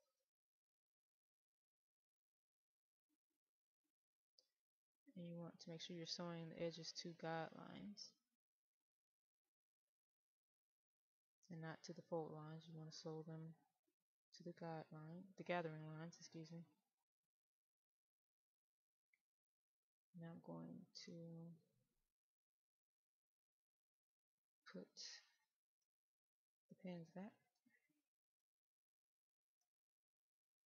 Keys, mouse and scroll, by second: 0.5-1.0 scroll down 1, 1.0 middle click, 2.2 click, 20.1 w, 20.6 click, 23.1-24.8 drag, 25.1 right click, 26.4 w, 27.0 w, 28.0 right click, 29.2 click, 29.6 right click.